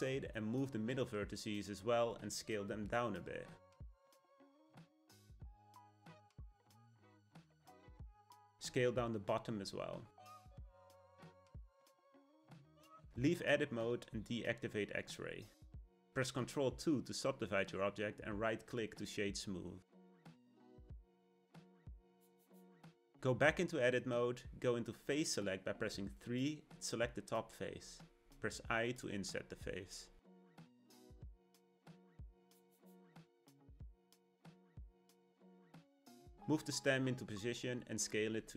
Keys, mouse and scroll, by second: 0.8 click, 3.4 r, 4.4 g, 6.1 s, 7.5 click, 8.7 s, 11.2-13.1 middle drag, 13.1 Tab, 14.8 click, 15.4 shift+middle click, 16.1-17.1 scroll up 1, 17.1 ctrl+2, 20.0-23.1 right drag, 23.7 Tab, 25.5-27.9 drag, 28.4-30.0 middle drag, 33.9 click, 34.1 Tab, 34.4-37.3 middle drag, 37.3 g.